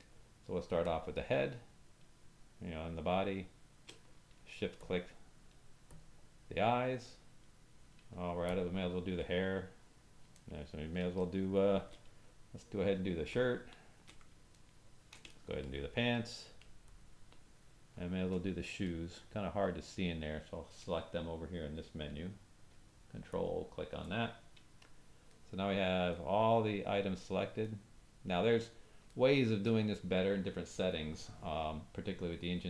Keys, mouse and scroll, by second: 0.9-3.8 drag, 4.8 shift+click, 5.9 shift+click, 8.4 shift+click, 10.3 ctrl+middle click, 11.2 shift+middle click, 13.3 shift+click, 14.5 ctrl+middle click, 15.3 shift+middle click, 16.8 shift+click, 18.9 middle click, 23.3 ctrl+click, 25.3 middle click, 26.1 shift+middle click, 27.7 middle click, 29.0 shift+middle click.